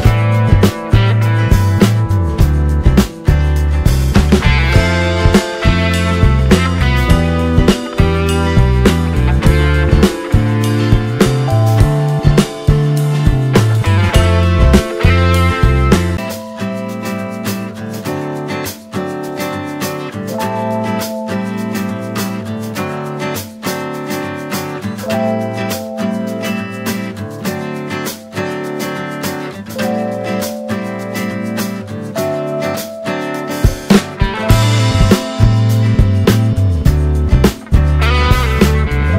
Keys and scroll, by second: 16.7 ctrl+space, 28.6 ctrl+space, 34.6 ctrl+space.